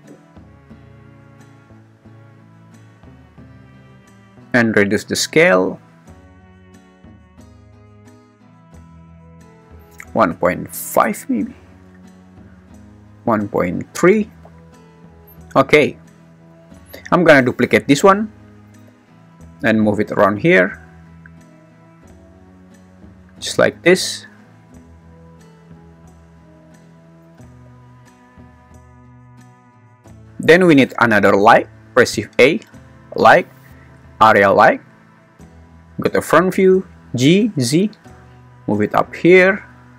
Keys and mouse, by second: 2.2 click, 5.3-6.7 drag, 7.3 click, 8.0 g, 8.0 y, 8.6 click, 9.0 click, 9.8 click, 12.6 click, 17.7 shift+d, 18.1 Escape, 18.6 g, 18.9 y, 22.9 click, 27.2 g, 27.5 y, 28.5 click, 30.2 shift+a, 32.1 shift+a, 36.7 g, 37.4 z.